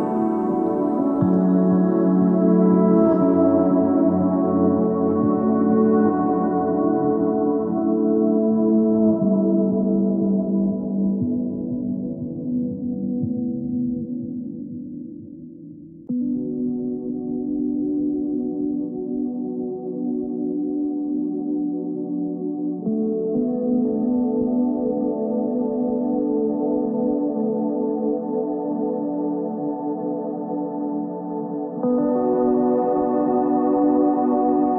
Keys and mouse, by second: 0.8-1.2 ctrl+z, 1.4 ctrl+z, 1.7 ctrl+z, 3.2 click, 3.4-4.8 typing, 6.1 x, 7.1 z, 7.8 ctrl+Tab, 10.0 click, 11.0 x, 11.8 ctrl+Tab, 16.4 f, 16.7 f, 17.7 f, 19.2 alt+m, 20.2 z, 20.5 z, 22.6 f, 23.0 f, 23.4 f, 25.7 z, 27.5 alt+m, 28.9 z, 31.0 f, 31.4 f, 31.7 f, 32.3 z, 33.7 alt+m, 34.4 z.